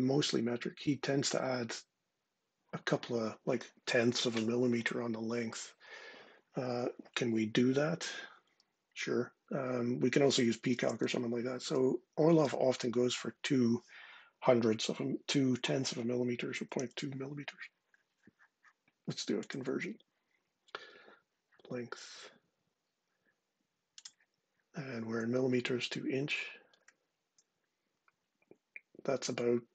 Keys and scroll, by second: 10.5 super+space, 11.4 c, 12.2 Return, 16.1-17.1 typing.